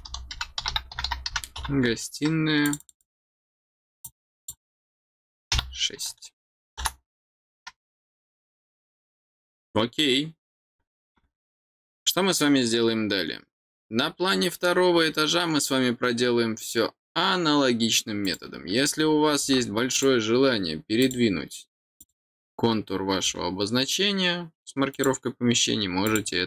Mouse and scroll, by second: 2.6 click, 2.8 click, 3.0 click, 4.0 click, 11.9-12.3 scroll down 2, 18.2 click, 19.9 click, 21.0 click, 22.0 click, 24.9 click, 26.0 click.